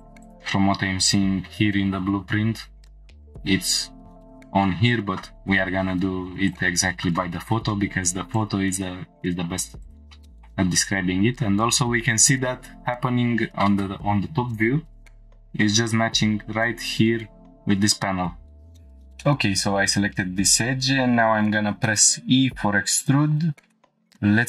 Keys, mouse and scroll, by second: 0.3 click, 4.9 scroll down 1, 8.4 scroll down 2, 9.8 click, 10.1 shift+middle click, 10.7 scroll up 3, 17.4-18.6 scroll down 2, 18.8 F5, 19.2 shift+middle drag, 20.1 scroll up 1, 21.6 e, 23.0 click, 23.4 scroll up 1, 23.6 shift+middle click.